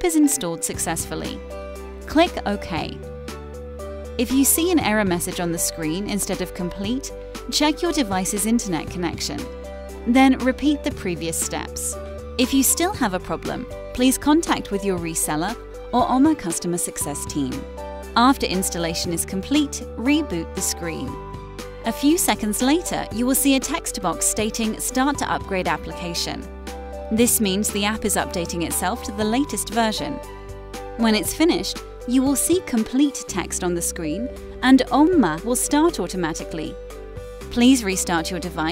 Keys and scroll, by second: 1.9 Return.